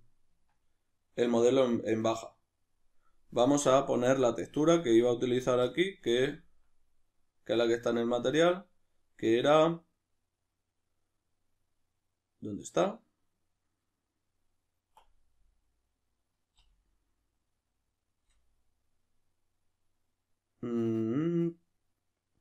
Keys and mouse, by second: 4.1-22.4 drag.